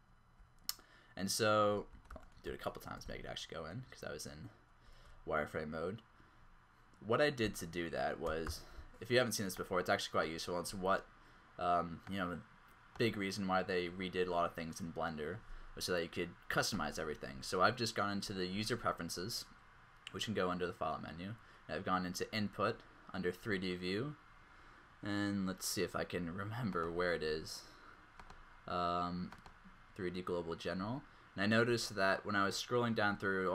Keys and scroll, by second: 2.3 alt+shift+z, 2.5 alt+shift+z, 7.4 z.